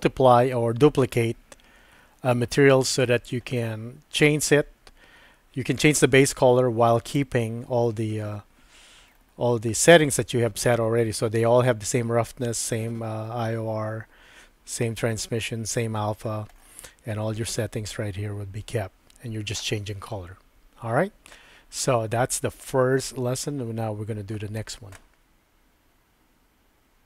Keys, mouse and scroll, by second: 7.1 click.